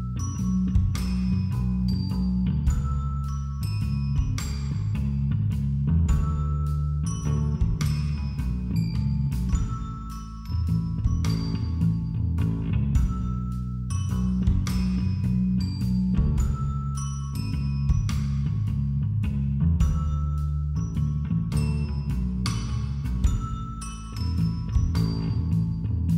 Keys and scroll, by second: 8.7 [.